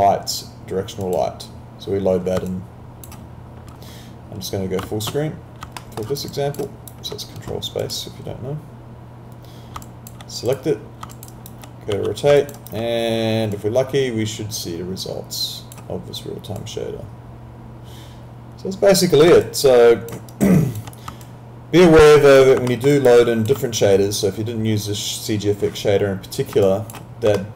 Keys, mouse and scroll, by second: 1.0 click, 2.5 alt+click, 5.0 ctrl+space, 5.8 alt+middle click, 6.1 alt+right click, 6.3 alt+click, 6.6 alt+right click, 7.9 click, 9.9 alt+click, 11.1 alt+click, 11.3 alt+right click, 11.9 e, 12.5 alt+click, 12.6 alt+right click, 13.5 click, 16.6 click, 19.4 alt+click, 20.3 alt+right click, 20.6 alt+click, 21.2 alt+click, 22.7 alt+middle click, 22.9 alt+right click, 23.2 alt+click, 26.7 alt+click, 27.4 alt+middle click.